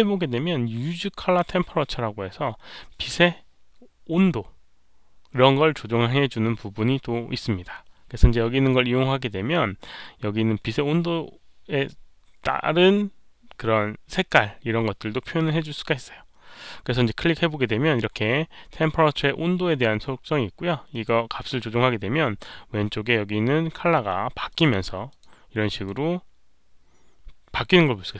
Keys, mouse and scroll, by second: 0.1 ctrl+a, 17.0 click, 20.9 click, 21.4 click, 24.4 click, 25.0 click, 25.6 click, 27.8 click.